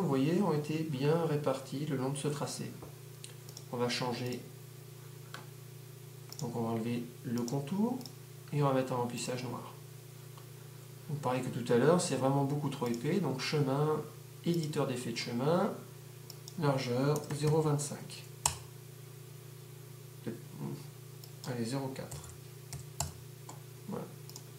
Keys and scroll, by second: 17.2-18.4 typing, 23.0 4.